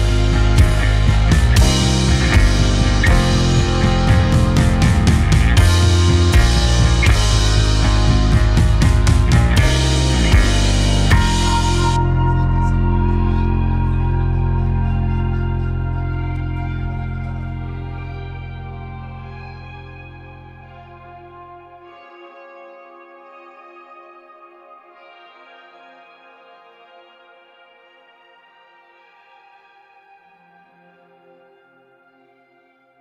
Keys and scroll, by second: 1.2-3.2 typing, 20.6 2, 22.7 shift+2, 27.1 g.